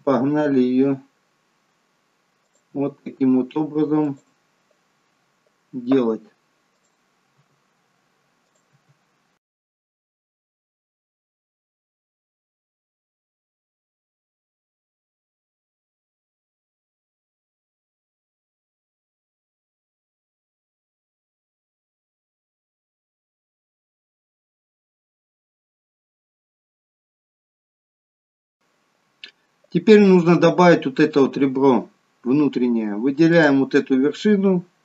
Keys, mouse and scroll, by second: 2.6 e, 6.7 click, 7.3 e, 8.6 e, 9.7-28.1 typing, 33.3 click.